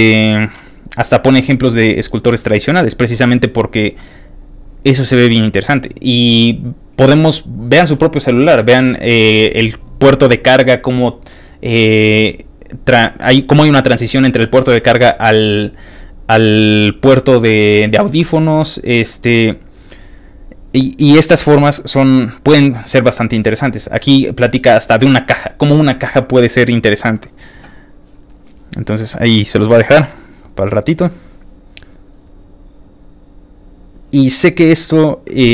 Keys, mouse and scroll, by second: 23.4 ctrl+click, 24.1 ctrl+click, 28.8 ctrl+click, 29.3 ctrl+click, 30.2 ctrl+click, 31.5 ctrl+click, 32.7 ctrl+click.